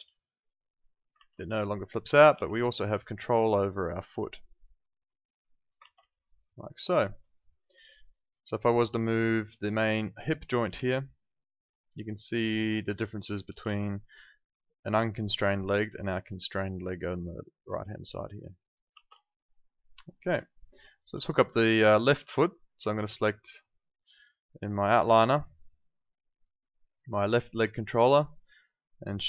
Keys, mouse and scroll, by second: 0.3 click, 1.1 ctrl+z, 1.4 alt+click, 1.6 alt+right click, 1.8 alt+middle click, 2.0 alt+right click, 2.3 e, 2.9 click, 5.8 ctrl+z, 6.1 alt+middle click, 6.2 alt+right click, 6.4 alt+click, 6.7 alt+right click, 7.0 alt+middle click, 7.2 alt+right click, 7.5 alt+middle click, 7.7 alt+right click, 8.1 alt+middle click, 9.1 click, 9.5 alt+click, 9.7 alt+right click, 10.0 alt+click, 10.4 alt+middle click, 10.7 w, 11.4 click, 13.0 alt+click, 13.1 alt+right click, 13.3 alt+click, 14.5 click, 18.9 ctrl+z, 19.2 alt+middle click, 19.5 alt+right click, 20.1 alt+middle click, 20.4 alt+right click, 20.7 alt+click, 25.9 click.